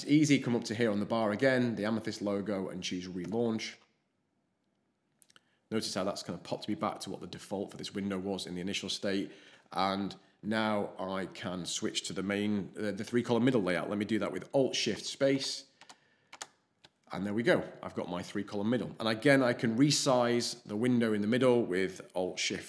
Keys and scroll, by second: 14.9 alt+shift+space, 15.3 alt+shift+space, 15.7 alt+shift+space, 16.3 alt+shift+space.